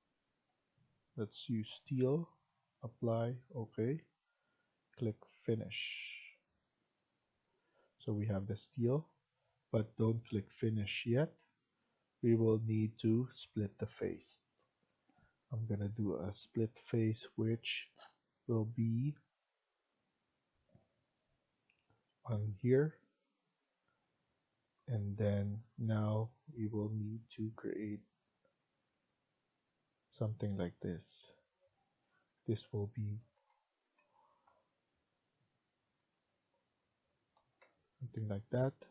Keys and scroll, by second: 7.9 Escape, 32.0 Escape, 32.3 Escape, 33.3 Escape, 33.7-34.3 typing, 37.3 Escape, 37.5 Escape.